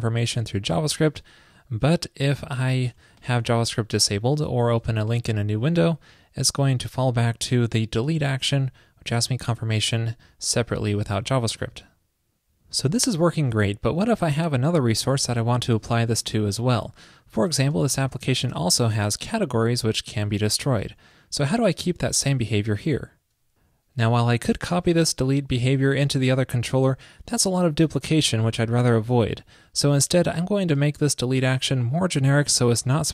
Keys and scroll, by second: 11.8 super+w.